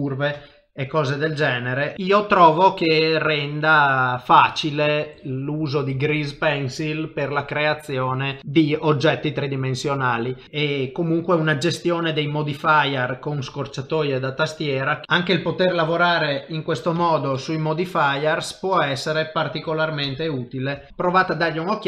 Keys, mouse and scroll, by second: 15.0 middle click, 15.8 ctrl+shift+v, 17.3 middle click, 18.8 middle click, 20.0 ctrl+shift+v, 20.9 middle click.